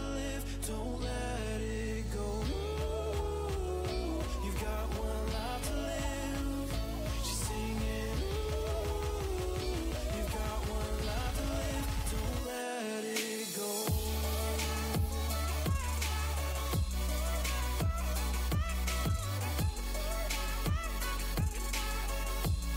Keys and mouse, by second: 0.1 Tab, 0.5 z, 5.1 Tab, 7.1 ctrl+e, 11.3 ctrl+r, 17.0 Tab, 17.9 Tab, 18.7 ctrl+r, 22.4 a.